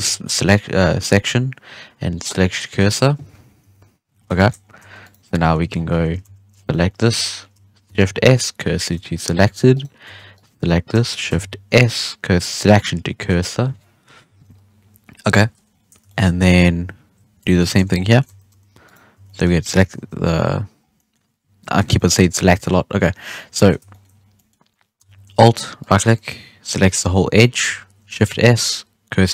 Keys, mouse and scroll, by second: 0.0 shift+s, 3.6 KP_1, 4.1 scroll down 2, 4.3 shift+middle drag, 4.5 scroll up 5, 4.7 Tab, 5.0 right click, 5.2 scroll down 1, 5.3 middle drag, 5.6 Tab, 5.7 scroll up 1, 5.9 1, 6.2 alt+a, 6.5 alt+shift+right click, 6.7 scroll down 2, 6.8 middle drag, 7.1 z, 7.8 shift+s, 9.1 scroll up 1, 9.4 Tab, 9.7 right click, 10.0 Tab, 10.3 right click, 11.2 shift+s, 14.2 KP_3, 15.5 scroll down 1, 15.6-16.0 scroll up 2, 16.0 shift+middle click, 16.2 scroll down 3, 16.5-17.4 scroll up 4, 17.4 Tab, 17.5 right click, 17.7 z, 17.9 scroll down 2, 18.0 middle drag, 18.2 alt+a, 18.4 1, 18.8 right click, 19.1 Tab, 19.2-19.6 middle drag, 19.6 1, 19.9 alt+a, 20.4-20.7 scroll up 2, 20.7 scroll down 1, 20.9-22.6 middle drag, 22.6-22.9 scroll down 3, 22.9-23.5 scroll up 7, 23.5 middle click, 24.1 scroll up 1, 24.3-25.7 middle drag, 25.7 alt+right click, 26.0 scroll down 1, 26.1-26.5 middle drag, 26.5-28.2 scroll up 1, 28.2 shift+s.